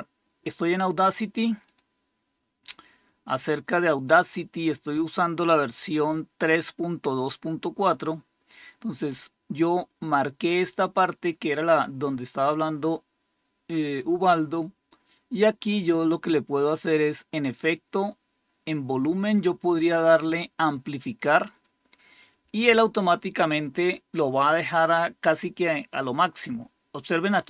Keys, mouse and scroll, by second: 1.5 click, 3.1 click, 7.8 click, 16.5 click, 24.5 click.